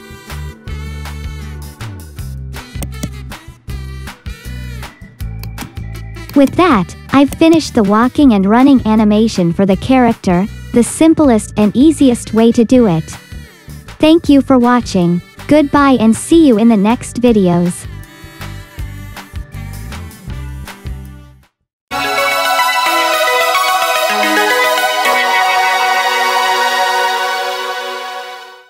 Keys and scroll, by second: 1.4 space, 7.6 space, 12.1 space, 12.9 ctrl+shift+c, 13.3 space.